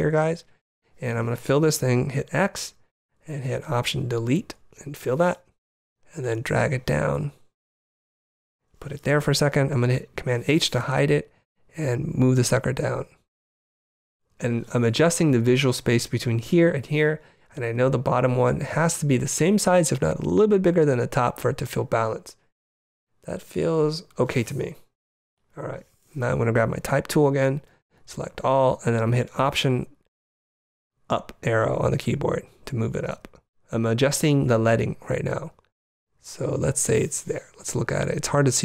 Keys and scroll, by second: 2.5 x, 4.4 alt+BackSpace, 5.2 alt+super+BackSpace, 10.0 super+h, 12.7 Down, 13.9 Up, 17.5 Down, 19.2 Down, 27.2 t, 28.0 super+t, 28.4 super+a, 31.6 alt+Up, 35.5 alt+Up.